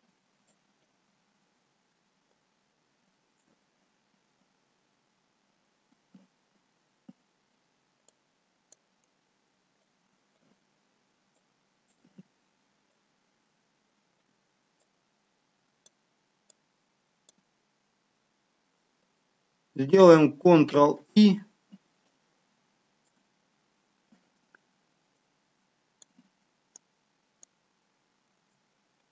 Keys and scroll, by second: 21.1 ctrl+i.